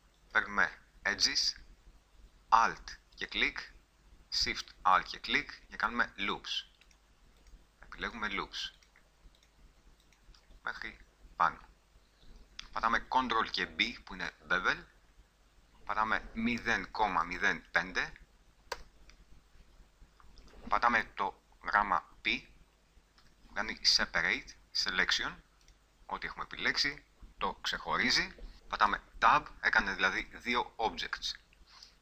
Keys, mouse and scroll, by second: 0.4-2.2 drag, 3.3-10.8 drag, 10.8-11.9 middle drag, 14.1 ctrl+b, 23.3 p, 29.1 Tab, 30.4 g, 31.4 click.